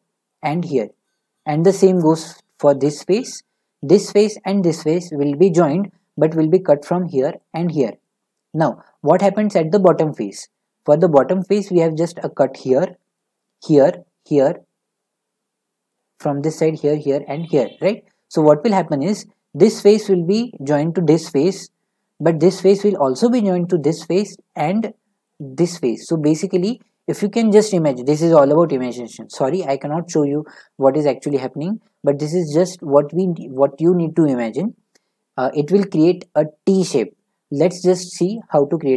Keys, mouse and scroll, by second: 0.3-5.0 middle drag, 9.1 middle click, 9.8 middle click, 13.1 middle click, 14.0-14.5 scroll, 15.3-16.7 middle drag, 18.0 middle click, 19.1-22.2 middle drag, 22.8-28.3 middle drag, 32.2-35.3 middle drag, 37.5 middle click.